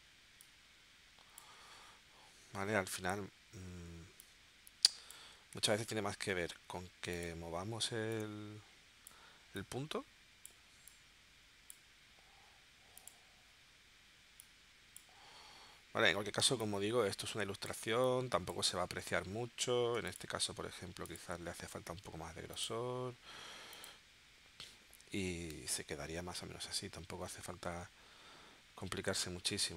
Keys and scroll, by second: 5.6 super+z, 6.3 a, 20.0 v.